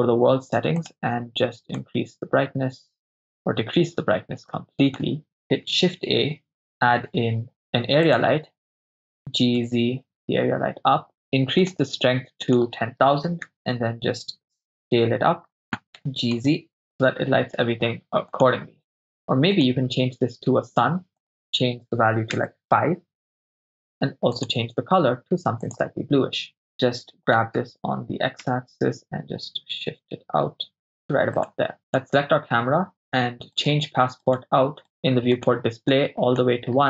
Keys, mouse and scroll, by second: 0.8 click, 5.7 shift+a, 9.4 g, 9.6 z, 11.6 click, 12.5-13.5 drag, 15.8 click, 16.0 g, 16.4 z, 18.4-19.7 drag, 21.2-22.5 drag, 24.4 click, 26.5 right click, 27.4 g, 27.6 y, 28.6 x, 31.5 click, 32.1 right click, 33.0 click, 33.0 right click, 33.6 right click, 35.4 drag, 35.9 click.